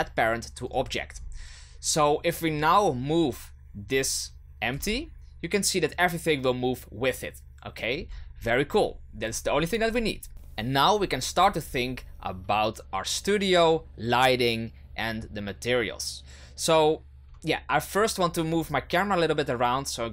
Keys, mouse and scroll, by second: 2.4 right click, 4.7 g, 10.3 KP_0, 18.6 right click.